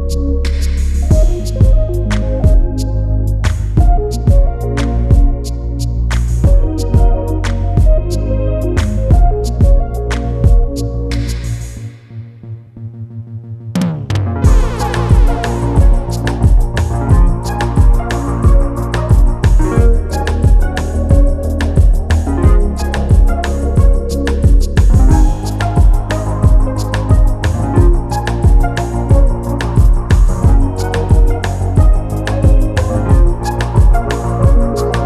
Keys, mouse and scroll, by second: 1.4 g, 7.9 click, 9.4 r, 13.4 g, 19.7 click, 21.7-22.8 drag, 22.8 KP_0, 23.1 KP_0, 25.6 click, 28.0 scroll down 2, 29.1 click, 30.1 s, 33.2 click.